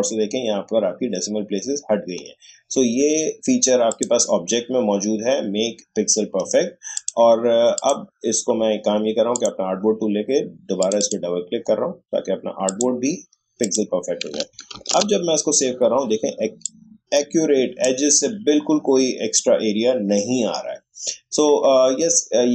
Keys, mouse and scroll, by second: 1.8 shift+scroll down 1, 3.9 click, 6.9 click, 14.7 ctrl+alt+shift+s, 16.6-20.2 drag.